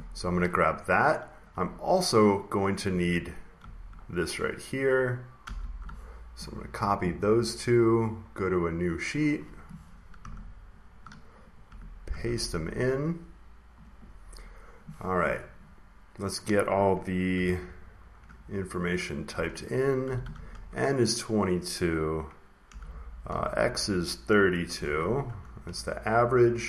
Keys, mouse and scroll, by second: 2.3 ctrl+click, 5.3 ctrl+c, 9.1 click, 10.3-11.3 ctrl+scroll, 11.3 click, 12.0 ctrl+v, 13.0 click, 14.3 click, 17.0-20.3 typing, 20.4 Left, 22.4-25.4 typing, 25.2 Return, 25.6 Left.